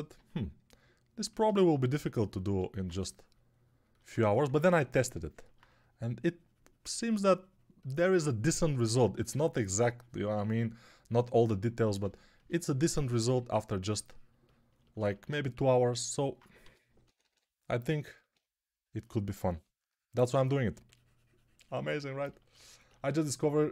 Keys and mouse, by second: 4.3 3, 16.5 g, 16.9 ], 17.1 ], 17.2 ], 19.4 3.